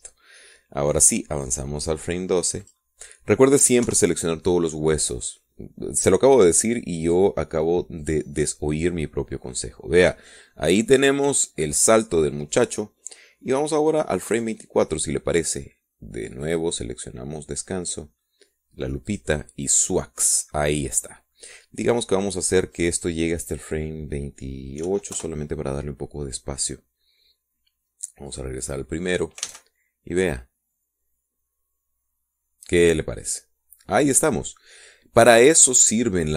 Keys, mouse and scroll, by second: 0.6-1.6 drag, 4.2 click, 5.4 Right, 8.6 click, 9.6 click, 16.1 click, 18.0 click, 20.7 click, 24.4 click, 26.5 8, 26.8 Return, 29.9 click, 31.1 alt+a.